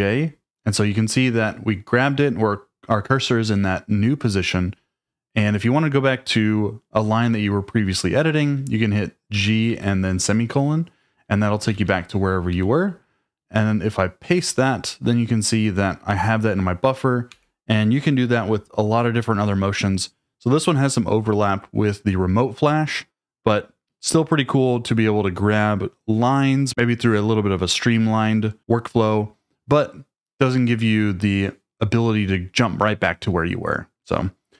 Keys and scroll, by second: 9.3-9.7 typing, 11.4-12.5 typing, 14.3 p, 17.3 u.